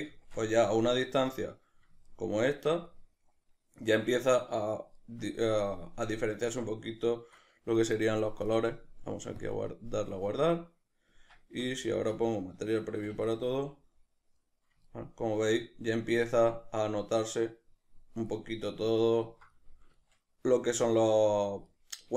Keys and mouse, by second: 10.4-13.4 drag, 11.3 Tab, 12.2 z, 13.4-22.1 middle drag.